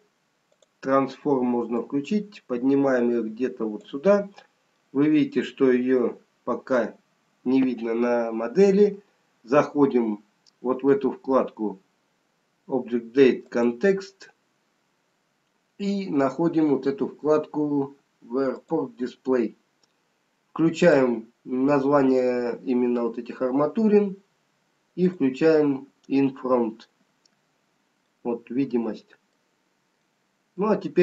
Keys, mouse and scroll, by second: 1.7 click, 4.6 middle click, 13.5 click, 18.4 click, 19.4-20.8 scroll down 2, 20.8 click, 25.1 click, 30.0 middle click.